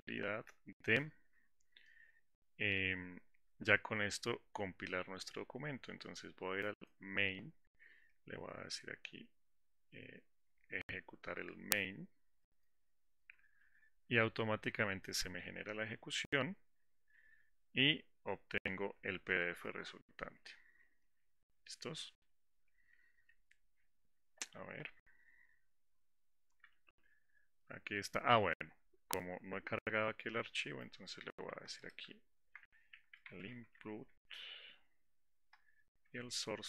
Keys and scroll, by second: 12.8 ctrl+shift+F10, 35.9 Return.